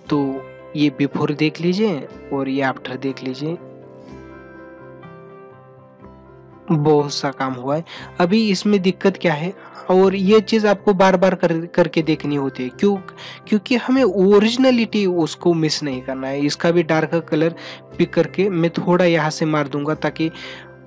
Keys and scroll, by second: 14.7 ], 17.2 ], 18.9 ctrl+alt+z.